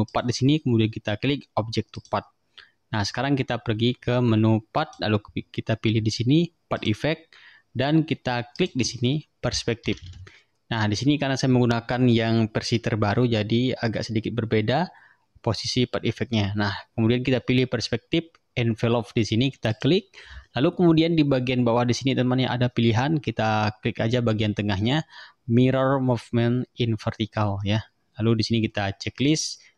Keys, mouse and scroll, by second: 0.2 click, 2.0 click, 4.9 click, 6.8 click, 8.6 click, 9.6-10.6 typing, 19.8 click, 29.3 click.